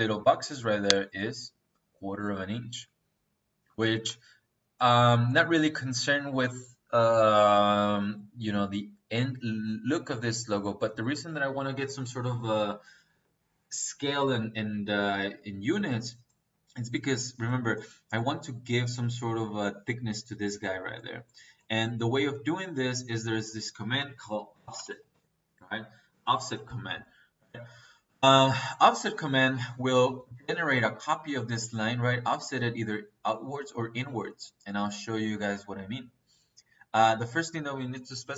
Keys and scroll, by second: 23.9 Escape, 24.5 o, 24.8 f, 26.0 Return.